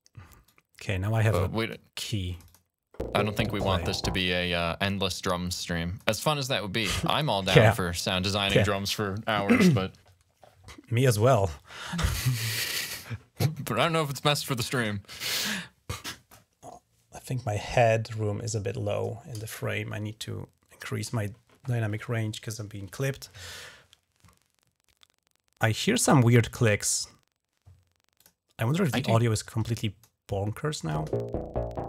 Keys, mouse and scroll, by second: 0.3-1.5 drag, 2.1 click, 2.3 click, 4.3-5.8 drag, 28.0 click, 29.6 click, 30.8 space.